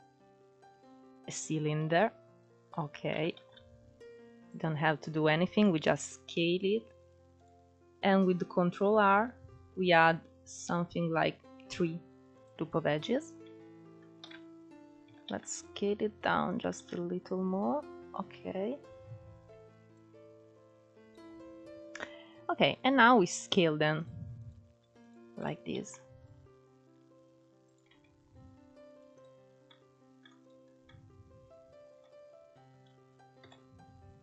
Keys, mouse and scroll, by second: 2.8 s, 4.9 click, 5.9 s, 7.4-7.7 scroll up 1, 7.7 s, 8.7-9.5 scroll up 1, 9.5 click, 12.8 ctrl+r, 15.0 Tab, 15.1 alt+z, 15.9 s, 17.7 alt+z, 18.4 click, 19.3 Tab, 20.4 Tab, 20.8 click, 22.1 Tab, 22.9-23.6 scroll up 1, 23.6 s, 25.3 click, 25.9 alt+shift+click, 26.6 s, 28.7 Tab, 29.0-29.4 scroll down 1, 29.4-29.8 scroll up 1, 29.8 right click, 30.4 scroll down 4, 30.6-31.3 middle drag, 31.3 click, 31.5 scroll down 4, 31.7-32.9 middle drag, 32.9-33.5 scroll up 1, 33.5-34.2 scroll up 2.